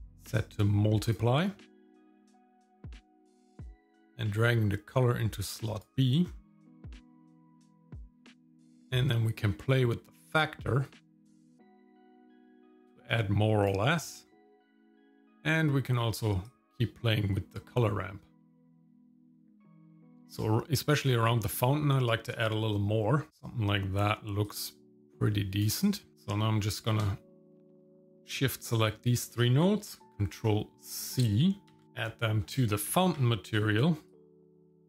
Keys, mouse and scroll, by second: 1.4 scroll down 1, 1.8 middle click, 2.3-3.0 scroll down 1, 3.8-5.8 drag, 6.3-7.8 scroll up 6, 8.3-13.7 drag, 14.0 middle click, 14.4 scroll down 1, 14.8 middle click, 16.4-18.7 drag, 19.1 click, 19.6 click, 23.3 middle click, 23.3-24.4 scroll down 2, 24.5-25.6 drag, 26.7 middle click, 27.5 shift+click, 28.1 shift+click, 28.7 middle click, 31.8 ctrl+c, 31.8 click, 32.0 middle click, 33.1 ctrl+v, 34.1 click, 34.8 middle click.